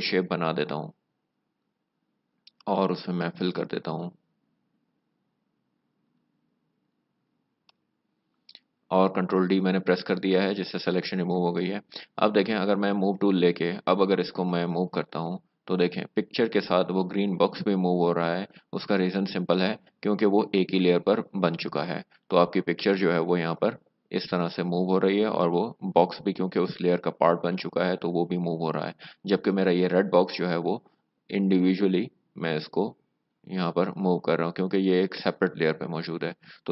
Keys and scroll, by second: 7.8 alt+BackSpace, 8.6 ctrl+d, 12.6 v.